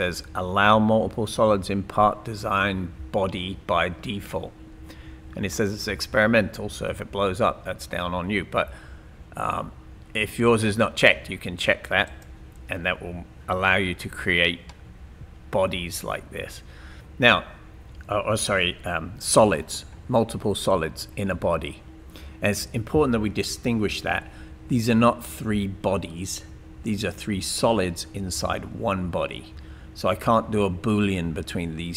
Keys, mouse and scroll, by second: 14.0-14.7 scroll down 2, 14.7 middle click, 15.9-18.1 middle drag.